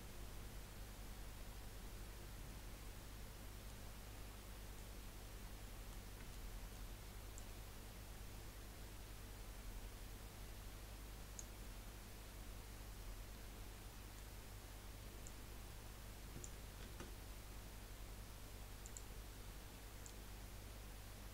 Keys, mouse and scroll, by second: 3.9 scroll up 1, 4.2-7.3 middle drag, 7.3-10.4 drag, 11.6-14.6 middle drag, 15.2 click, 16.8 ctrl+z, 18.8 click, 20.0 click.